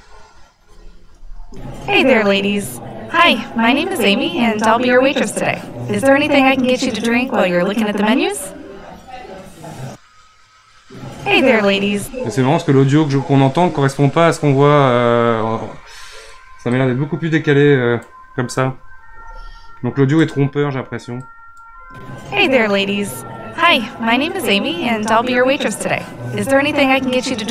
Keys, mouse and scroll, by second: 1.3 space, 11.9 space, 16.7-19.0 drag, 19.0 g, 21.2 click, 21.8 space.